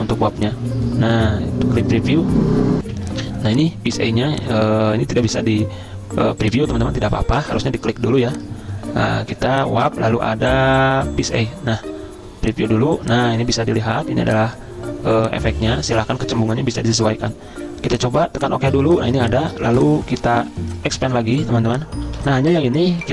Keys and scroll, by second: 2.8 F10, 2.9 F10, 18.8 z, 19.7 v, 22.1 z.